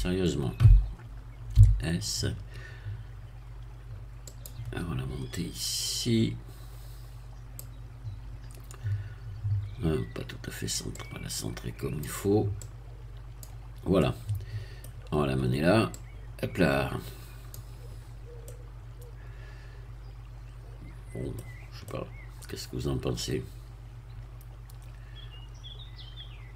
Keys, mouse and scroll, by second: 1.5 s, 4.2 click, 5.3-7.7 drag, 10.9-12.2 drag, 12.6-13.6 drag, 13.9 middle click, 14.8-15.3 scroll down 1, 15.9-17.6 drag, 18.0-18.4 scroll up 1, 18.4-21.4 middle drag, 21.4-21.8 scroll down 1, 21.8-26.5 middle drag.